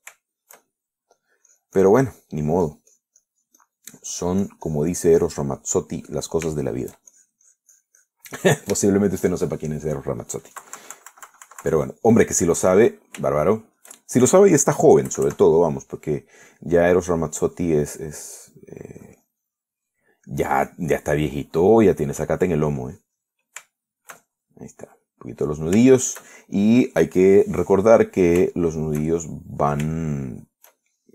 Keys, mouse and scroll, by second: 0.8 middle click, 1.4-2.5 shift+middle drag, 2.7 shift+click, 3.7-5.1 drag, 5.2-6.7 drag, 6.9 middle click, 7.8 shift+middle click, 8.4-9.5 shift+drag, 9.6 shift+middle click, 10.1 shift+click, 10.1 shift+right click, 10.6 shift+middle click, 11.2 shift+middle click, 11.8 KP_Subtract, 13.1 click, 13.7 right click, 14.3 shift+middle click, 16.3 KP_Add, 17.1-18.4 middle drag, 18.4 click, 19.4 click, 20.2 click, 21.5 click, 22.5 click, 23.4 click, 24.2 click, 25.0 shift+middle click, 25.9-27.1 middle drag, 27.2 shift+middle click, 29.3-31.1 middle drag.